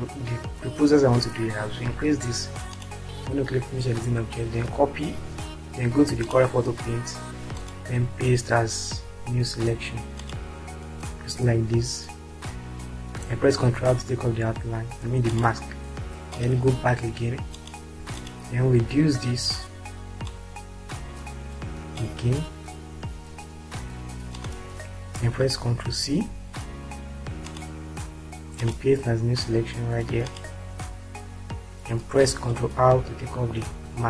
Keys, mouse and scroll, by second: 2.8 click, 5.7 ctrl+c, 13.5 ctrl+r, 15.7 click, 17.6 ctrl+click, 18.6 ctrl+click, 20.6-21.9 shift+drag, 24.5 click, 26.1 ctrl+c, 33.7 ctrl+r.